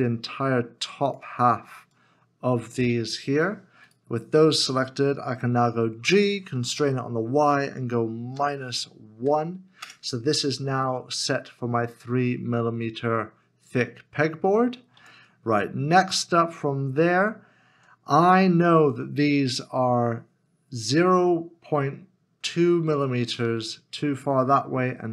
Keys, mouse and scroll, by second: 3.9-5.0 scroll down 1, 5.0 right click, 5.3 g, 8.3 y, 9.2 1, 9.8 Return, 15.0 Tab, 16.1-17.2 scroll up 1, 17.2-17.7 scroll down 1.